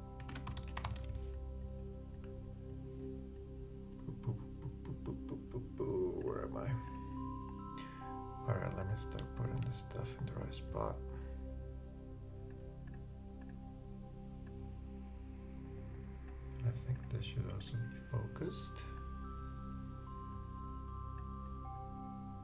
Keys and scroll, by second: 0.0-0.5 typing.